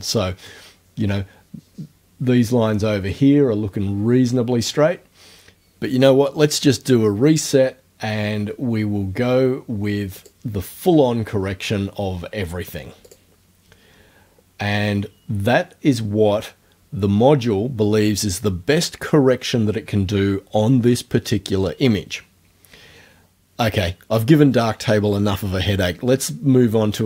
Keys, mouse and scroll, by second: 10.2 click, 13.1 click.